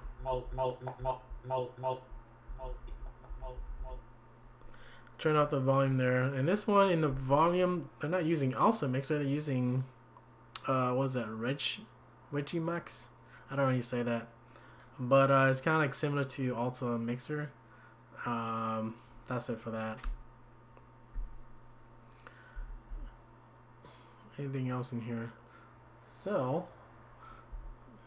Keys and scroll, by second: 1.0 Left, 1.3 Left, 1.8 typing, 1.8 Left, 2.5 Left, 2.7 Left, 2.9 Left, 3.3-4.0 typing, 20.0 Escape, 27.5 Up.